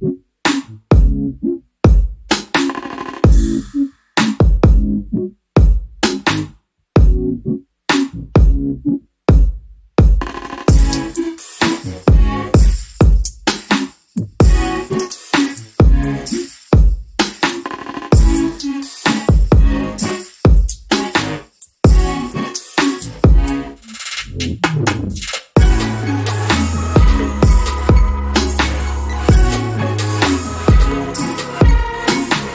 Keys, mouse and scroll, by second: 2.7 a, 3.5 click, 7.6 click, 11.4 ctrl+Num_Lock, 11.6 a, 13.1 click, 14.8 click, 16.5 click, 17.4 click, 19.3 a, 20.0 click, 22.0 i, 22.6 click, 22.8 a, 23.4 click, 24.5 i, 25.0 click, 25.3 a, 25.9 click, 27.7 scroll down 1, 29.4 click, 29.9-30.3 alt+scroll up 1, 30.9 click.